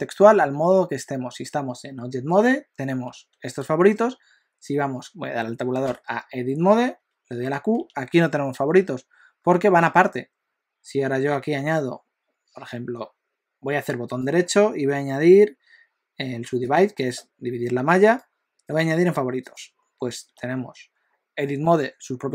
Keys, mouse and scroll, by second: 3.2 q, 5.9 Tab, 7.8 q, 14.0 right click, 18.0 right click, 20.2 q.